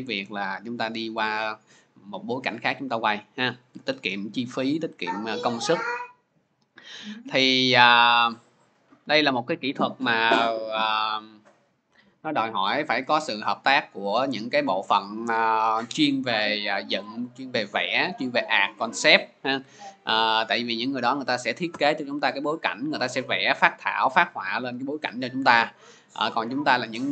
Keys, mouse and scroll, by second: 0.7 scroll, 3.6-4.2 scroll, 6.0 click, 8.3 click, 8.9 scroll down 1, 9.0 click.